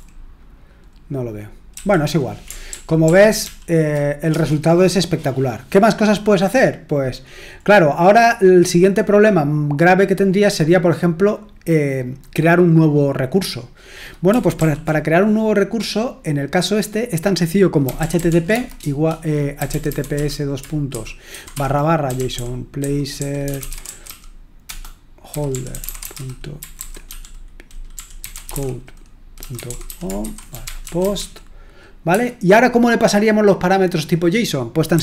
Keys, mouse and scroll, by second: 1.7 q, 2.6 ctrl+p, 3.0 ctrl+p, 3.4 ctrl+p, 4.3 Return, 7.6-9.0 scroll down 1, 9.2-10.7 scroll down 1, 10.7-11.6 scroll down 1, 12.0-12.9 scroll down 1, 13.8 click, 14.5 ctrl+l, 17.5-32.0 typing, 34.9-35.0 typing.